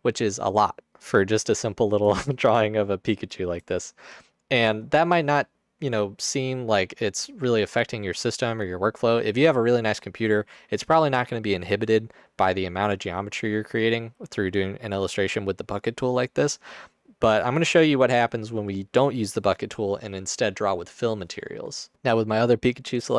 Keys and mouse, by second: 2.3 shift+click.